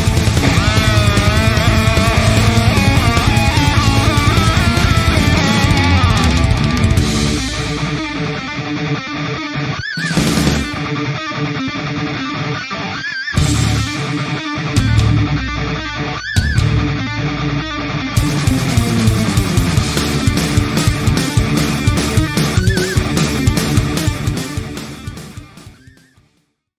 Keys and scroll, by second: 5.9 ctrl+0.